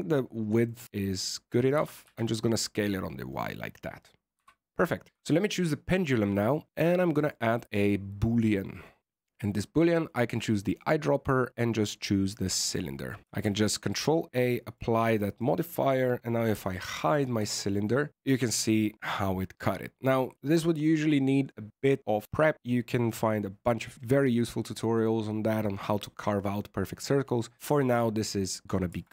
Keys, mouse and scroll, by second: 0.6 middle click, 1.0 middle click, 1.7 s, 4.3 z, 4.6 middle click, 5.1 right click, 5.1 shift+middle click, 5.1 middle click, 6.7 click, 7.1 click, 10.6 click, 13.4 ctrl+a, 14.0 middle click, 15.2 right click, 16.4 h, 16.8 middle click, 17.3 Tab, 17.7 middle click, 18.1 right click, 18.1 Tab, 18.2-18.8 scroll up 3, 18.8-19.5 scroll down 1, 27.1 scroll down 2, 27.6-28.8 scroll up 2, 28.8 Tab.